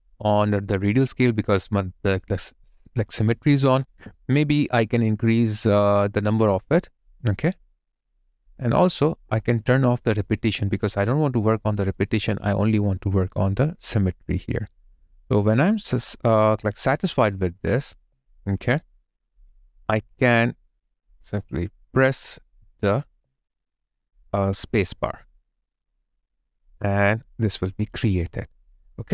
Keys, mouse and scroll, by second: 1.5 alt+click, 17.9 alt+click, 23.0 alt+click.